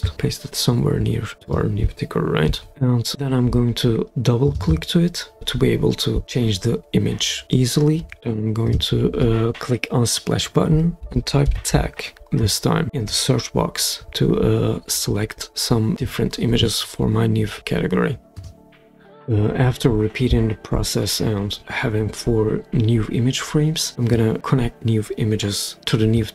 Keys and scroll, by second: 2.4 super+v, 10.7-12.1 typing.